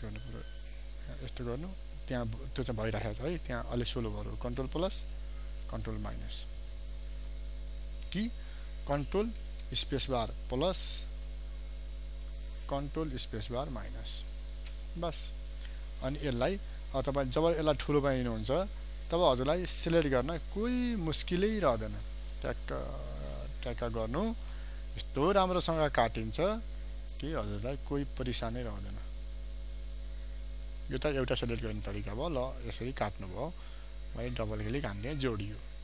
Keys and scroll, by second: 10.3 ctrl+space, 14.2 ctrl+alt+space, 17.2 ctrl+space, 34.0 ctrl+space.